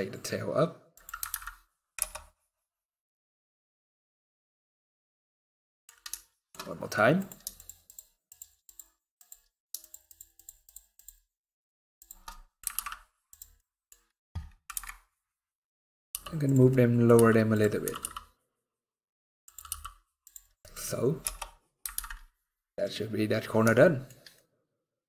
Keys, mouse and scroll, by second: 1.0 alt+a, 1.6 KP_0, 2.5-3.0 scroll up 1, 3.0-3.3 scroll up 2, 4.0-4.5 scroll down 8, 4.9 scroll up 1, 5.0 middle click, 5.8 shift+middle click, 6.3 scroll up 2, 6.9 click, 7.2 shift+click, 8.9 click, 9.5 shift+click, 12.0 middle click, 12.4 alt+d, 13.2 middle click, 13.8 scroll down 2, 14.4 scroll down 1, 14.4 KP_Decimal, 15.2 middle click, 15.8 g, 16.4 middle click, 16.8 g, 17.5 r, 19.4 g, 20.3 middle click, 20.9 KP_0, 21.7 alt+a, 21.8-22.3 scroll up 5, 22.7 scroll down 1, 23.1-23.5 scroll down 7, 23.5 shift+middle click, 24.5-25.0 shift+scroll down 4.